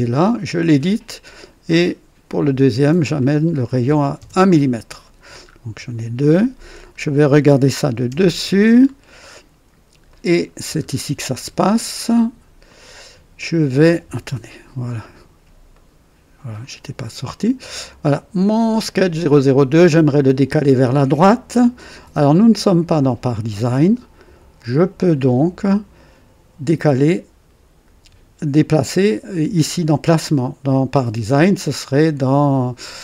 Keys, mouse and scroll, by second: 0.2 click, 2.2 click, 3.8 KP_1, 4.1 KP_Enter, 5.4 scroll up 2, 6.7-7.0 scroll down 2, 8.0 KP_2, 8.7-9.1 scroll down 2, 9.2 right click, 10.0-10.6 right drag, 10.7-11.1 scroll up 1, 12.6 click, 14.2 KP_2, 14.9 right click, 15.6 right click, 16.8 scroll up 1, 19.0 click.